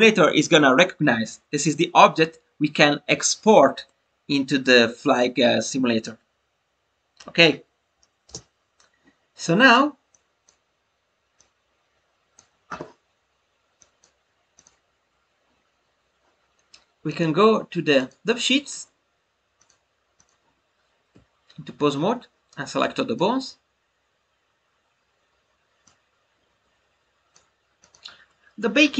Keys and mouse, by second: 10.1 click, 11.3-12.3 drag, 13.7 click, 17.0-18.0 drag, 19.6-20.2 drag, 22.8 click, 25.8-27.3 drag, 27.8-28.9 drag.